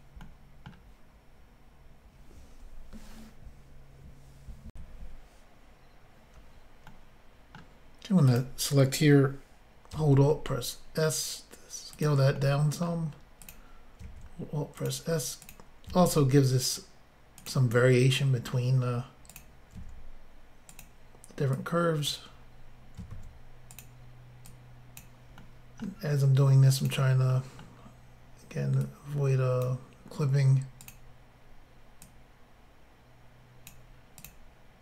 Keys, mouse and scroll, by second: 0.3 middle click, 4.7 Insert, 6.9 middle click, 8.3 click, 10.1 alt+s, 11.9 click, 12.0 click, 12.4 middle click, 13.4 click, 14.8 alt+s, 14.8 click, 15.5 click, 16.3 alt+s, 17.4 click, 17.5 click, 17.8 middle click, 19.3 click, 19.8 s, 20.7 click, 21.6 click, 23.1 alt+s, 23.8 click, 23.8 click, 24.5 click, 25.4 middle click, 26.8 click, 26.9 click, 27.3 middle click, 28.9 click, 30.8 click, 30.9 click, 32.1 click, 34.2 click, 34.3 click.